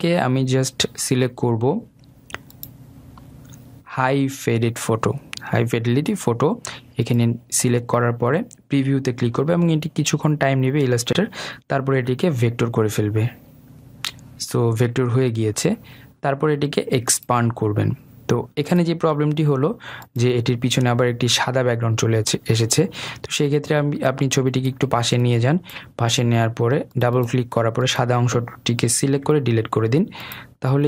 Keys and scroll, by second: 29.7 Delete.